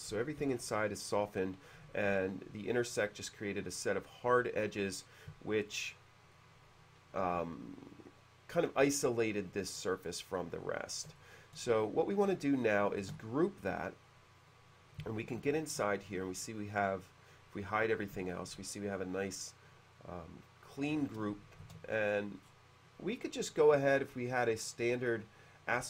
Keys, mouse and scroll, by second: 1.9 typing, 4.8 click, 4.8 h, 11.3 shift+middle click, 12.2-12.6 middle drag, 13.2 shift+g, 14.3 click, 14.5 click, 16.0 ctrl+5, 16.2-21.1 middle drag, 21.8 shift+c, 22.5-22.9 scroll up 1, 24.5 click.